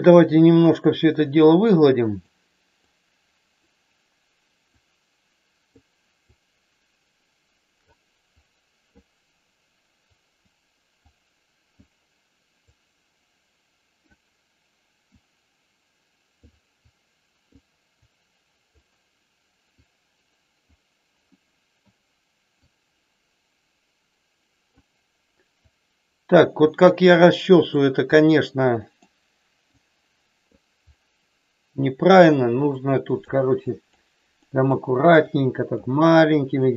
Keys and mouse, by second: 1.3 click, 2.9 click, 4.8 click, 6.3-7.8 drag, 8.3 click, 10.0 click, 11.0 click, 12.7-13.9 drag, 15.2-16.3 drag, 16.8 click, 18.0 click, 19.8 click, 21.3 middle click, 22.7-24.8 drag, 25.5-26.5 drag, 27.0 click, 28.7 middle click, 29.8 click, 32.7 click, 33.7 click, 34.4 middle click, 35.2 click, 36.3 click.